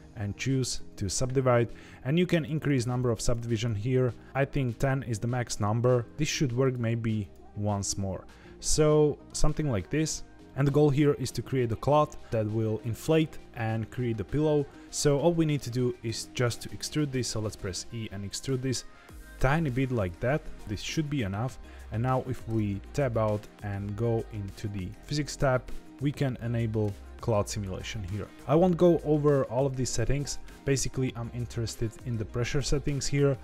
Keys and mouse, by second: 2.3 click, 2.5 click, 2.7 click, 3.0 click, 3.1 click, 3.3 click, 3.5 click, 4.6 click, 6.6-7.3 right drag, 7.8-9.2 middle drag, 10.4 shift+middle click, 17.4 e, 22.4 Tab, 24.9 click.